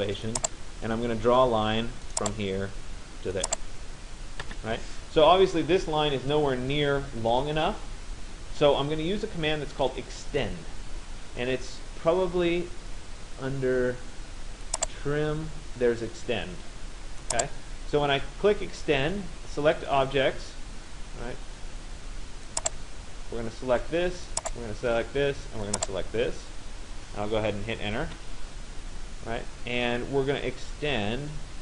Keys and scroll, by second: 27.7 Return.